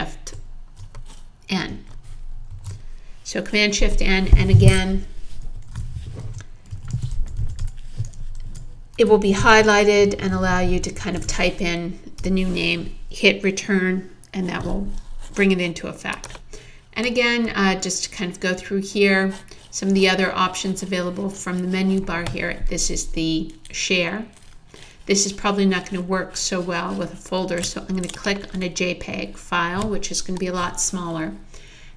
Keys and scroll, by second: 2.5 shift+super+n, 5.7-11.7 typing, 12.2 Return.